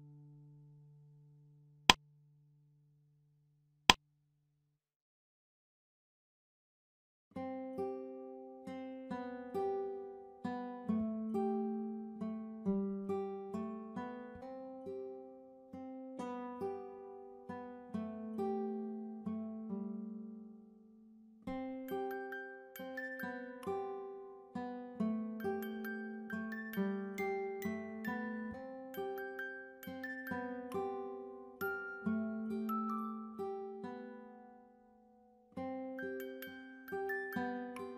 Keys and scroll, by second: 22.6 Return, 26.4-28.6 typing, 30.1-32.5 typing.